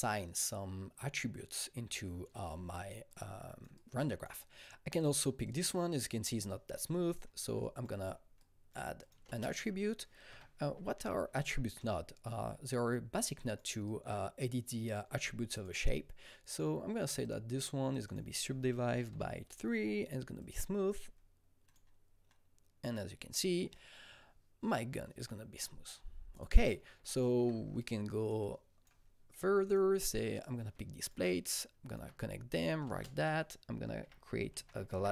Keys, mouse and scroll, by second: 3.1 click, 3.1 click, 3.7-5.4 drag, 5.4 double click, 6.4-8.4 shift+drag, 8.4 click, 9.0-10.6 drag, 9.2 ctrl+space, 10.0-11.5 typing, 11.8 Return, 12.7-17.2 drag, 17.2 click, 17.9 click, 18.0 double click, 18.9 KP_3, 19.1 Return, 20.4 click, 20.9 click, 21.6 click, 23.9 click, 26.3 click, 26.3 click, 27.0-27.8 scroll, 27.8 click, 27.8 alt+middle click, 28.4-30.3 drag, 30.3 double click, 31.2-34.0 shift+drag, 32.8 ctrl+space, 33.8-35.1 typing.